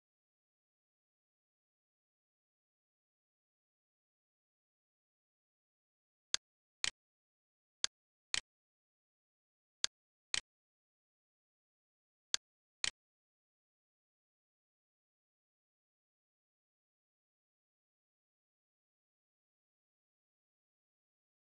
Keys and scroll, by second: 1.2-3.1 typing, 4.5 Return, 11.5 Return, 12.9-14.3 typing, 15.4 BackSpace, 17.5-19.0 typing, 20.6 Return.